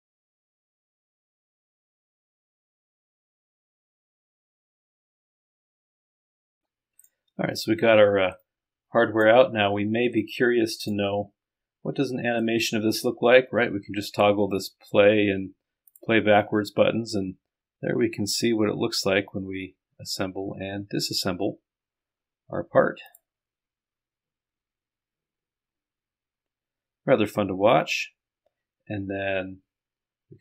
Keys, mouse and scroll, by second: 6.2 KP_Subtract, 6.5 click, 8.4 click, 10.2 click, 11.0-12.3 scroll up 1, 15.9 click, 23.1 click.